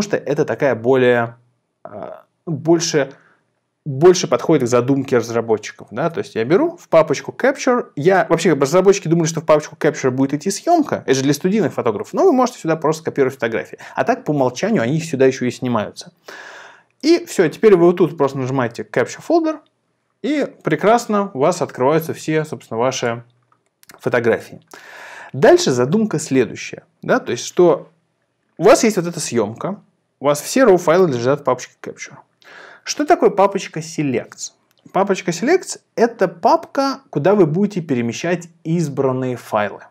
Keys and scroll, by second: 6.0 super+m.